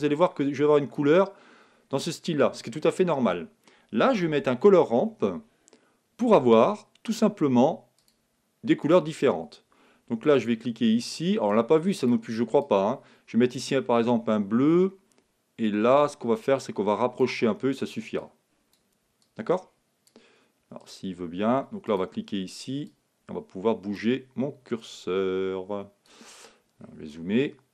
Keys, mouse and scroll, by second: 1.9-4.6 middle drag, 1.9-2.8 scroll up 1, 2.8-3.1 scroll down 1, 4.4 shift+a, 9.2-12.4 drag, 15.9-17.8 drag, 18.2-24.5 drag, 24.6 click, 25.3-26.5 drag, 26.3-27.7 middle drag.